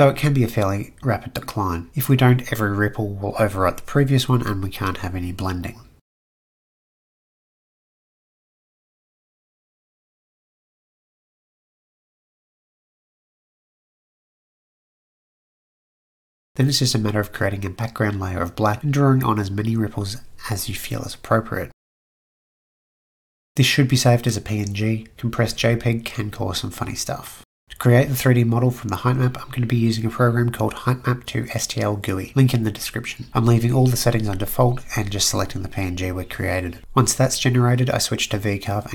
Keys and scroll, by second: 5.6 typing, 11.7 Return, 20.0 ctrl+z, 23.2 ctrl+s, 23.9-24.8 typing, 27.6 Delete, 35.1-35.9 typing.